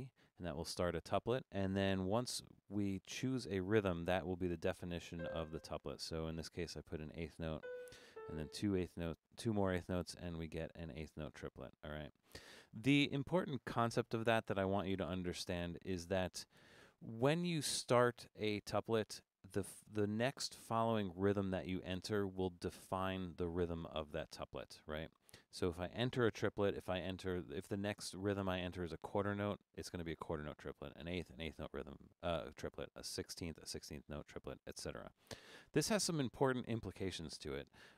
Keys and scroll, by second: 4.6 Up, 5.2 4, 7.4 Down, 7.6 4, 7.9 Down, 8.1 4, 9.3-10.1 typing, 12.5 Escape, 16.6 BackSpace.